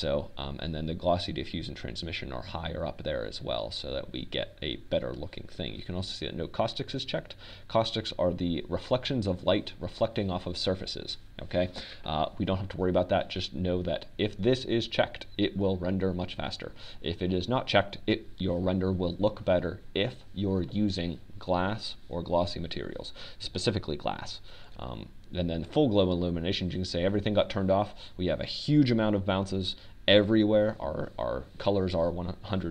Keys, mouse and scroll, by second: 27.9-30.0 drag.